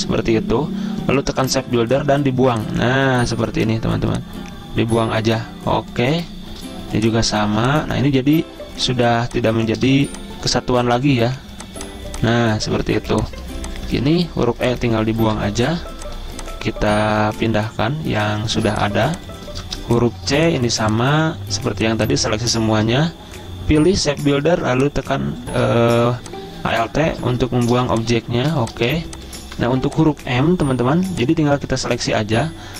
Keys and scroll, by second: 10.0 v, 13.0 ctrl+z, 14.0-14.7 typing, 15.5 Delete, 18.8 z, 20.5 typing, 27.9-28.4 typing, 29.7 typing.